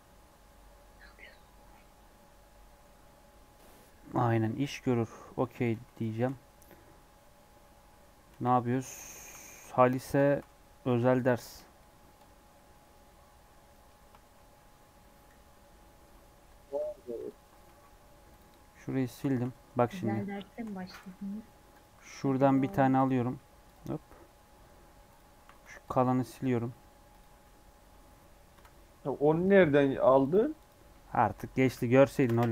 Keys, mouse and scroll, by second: 1.5 scroll down 1, 1.7-4.7 middle drag, 5.5 g, 6.1 shift+middle click, 6.5 Tab, 7.1 middle click, 7.6-8.2 scroll up 1, 8.2 KP_1, 8.7 3, 9.2 1, 9.4 alt+z, 9.9 click, 10.1 shift+scroll up 1, 10.2 shift+middle click, 10.4 3, 10.8 1, 11.1-14.5 drag, 14.5-15.0 scroll up 3, 15.3 3, 16.6 ctrl+KP_Add, 17.1 ctrl+KP_Add, 17.6 x, 18.8 scroll down 1, 19.3 2, 19.5-20.3 alt+scroll up 5, 20.4 shift+middle click, 20.9 alt+z, 21.6 alt+click, 22.0-22.5 scroll down 5, 22.5 shift+d, 23.6 click, 23.7 Tab, 24.5 Tab, 25.0 click, 25.3 1, 25.6 alt+z, 27.1 x, 27.2 Tab, 28.5 KP_7, 29.4-30.8 right drag, 30.8 scroll down 1, 31.0 shift+middle click, 31.4 r.